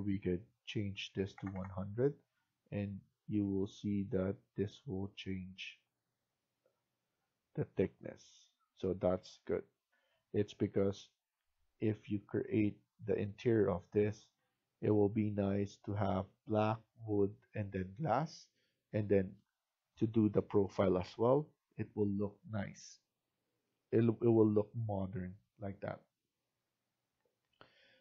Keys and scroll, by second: 0.8-1.8 typing.